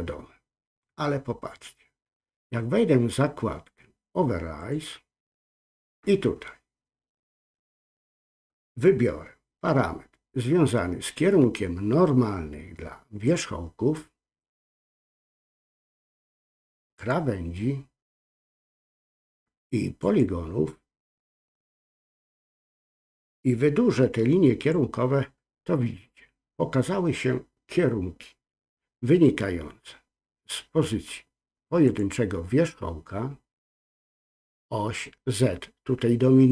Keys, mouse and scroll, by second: 4.6-25.1 drag, 31.9 click.